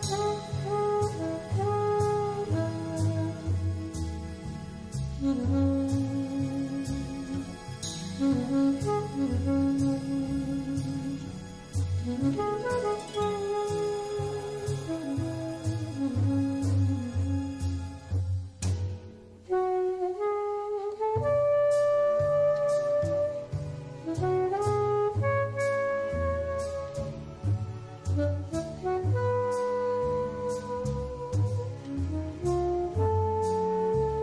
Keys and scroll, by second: 10.4 super+c, 11.0 super+f, 12.0 super+c, 12.5 super+f, 16.8 super+space, 17.6 super+y, 19.8 super+y.